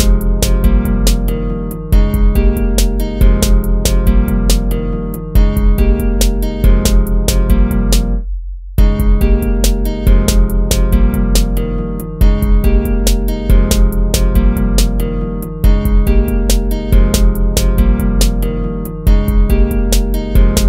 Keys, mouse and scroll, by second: 1.6 ctrl++, 1.9 ctrl++, 2.3 ctrl++, 2.9 ctrl+-, 3.5 ctrl+z, 5.7 ctrl+z, 6.6 ctrl++, 7.5 ctrl+-, 7.8 ctrl+-, 8.2 ctrl++, 8.6 ctrl+z, 10.8 ctrl+z, 11.8 ctrl+z, 13.0 ctrl+-, 13.3 ctrl++, 13.7 ctrl+z, 14.2 ctrl+-, 14.9 ctrl+-, 15.2 ctrl++, 19.4 ctrl+z.